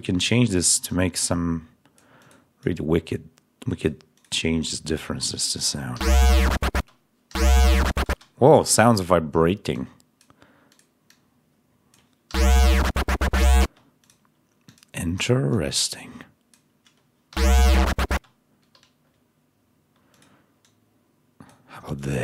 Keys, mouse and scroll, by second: 0.4 click, 0.8-2.1 drag, 2.5-3.9 drag, 4.0 click, 5.8 l, 6.6 space, 7.4 l, 8.0 space, 12.2 l, 13.5 space, 13.9 click, 14.6 click, 15.1 click, 15.4-16.6 drag, 17.2 l, 18.0 space, 18.1 scroll down 1, 20.0 click, 20.5-21.6 drag, 21.9 click.